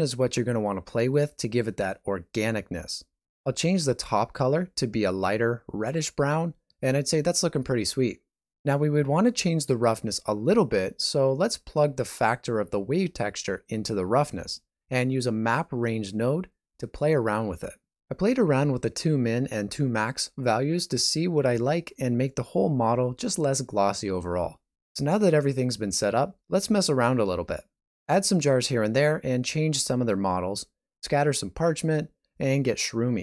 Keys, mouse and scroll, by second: 11.2 typing, 28.4 shift+middle click, 28.4 g, 28.4 r, 29.3 g, 30.0 alt+a, 30.1 middle click, 30.8-31.2 scroll down 3, 31.2 shift+middle click, 31.7 middle click, 32.1 scroll down 2, 32.3 shift+middle click, 33.0 right click, 33.1 middle click.